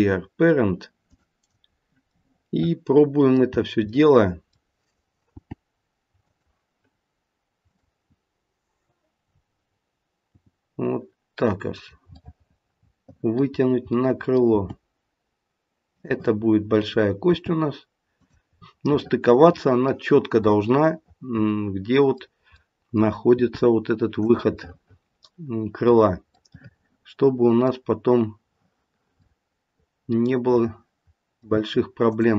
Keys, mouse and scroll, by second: 2.1 middle click, 2.4 middle click, 2.9 middle click, 3.5-3.9 scroll down 2, 3.9 middle click, 5.3 g, 7.6 click, 10.3 g, 12.1 middle click, 12.7 middle click, 13.5-14.5 scroll down 3, 13.9 middle click, 14.5 g, 16.9 click, 17.2 g, 18.5-19.1 scroll up 5, 18.9 middle click, 19.1 middle click, 20.5 middle click, 22.6 middle click, 23.3 g, 24.6 middle click, 25.4 middle click, 26.3 middle click, 27.9-29.2 scroll down 3, 29.2 middle click, 32.0 click.